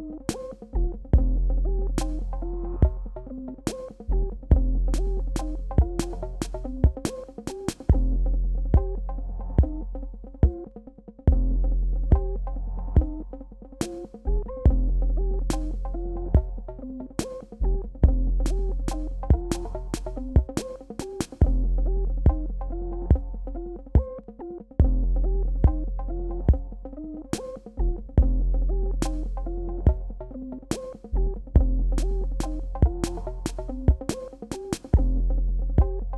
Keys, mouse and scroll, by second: 5.9 click, 7.9 ctrl+click, 13.4 ctrl+v, 14.8 click, 17.5 alt+shift+Num_Lock, 17.5 click, 18.8-29.9 alt+shift+drag, 29.9 ctrl+shift+z, 30.3-36.1 drag.